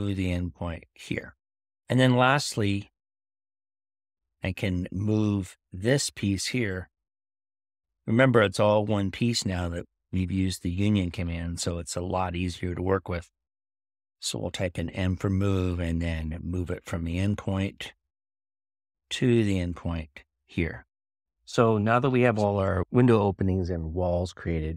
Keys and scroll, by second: 6.0 m.